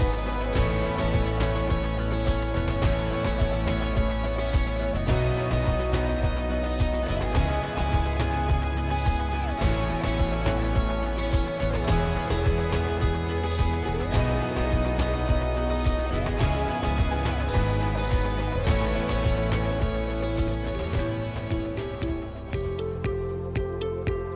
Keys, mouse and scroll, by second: 1.8 click, 2.7 click, 3.7 right click, 5.3 click, 7.4 click, 8.9 click, 10.6 click, 12.2 click, 12.2 right click, 13.7 click, 16.1 middle click, 18.9 click, 20.0 click, 20.9 click, 21.6 ctrl+click, 22.3 ctrl+click, 23.0 click.